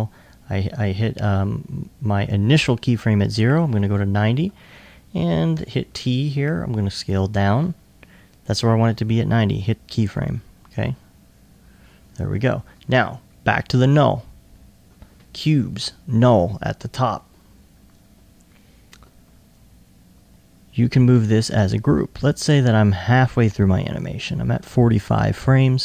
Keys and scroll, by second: 4.2 r, 5.6 t, 20.2 e.